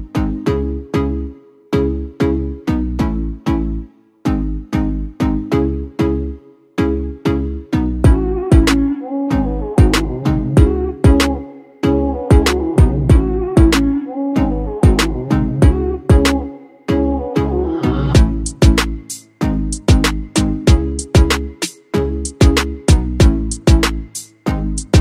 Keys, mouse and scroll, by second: 1.5-4.2 ctrl+alt+shift+drag, 1.9-2.6 typing, 7.4-9.2 scroll down 1, 11.6-12.4 scroll down 1.